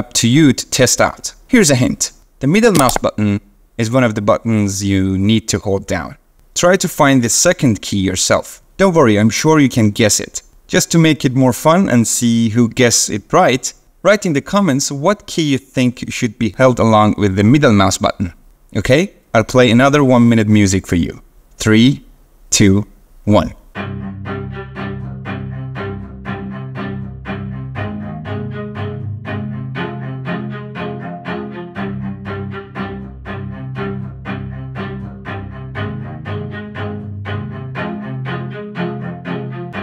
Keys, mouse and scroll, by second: 2.8-6.0 middle drag.